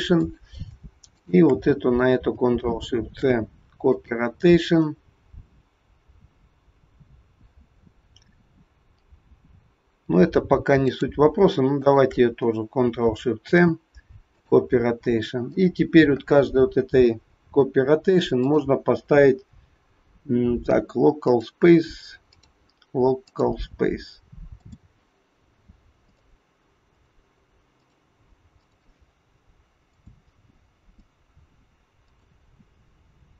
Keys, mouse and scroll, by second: 0.1 click, 1.1 shift+click, 3.1 ctrl+shift+c, 10.9 click, 11.8 shift+click, 13.5 ctrl+shift+c, 15.7 click, 18.4 click, 22.3 click, 24.5 click.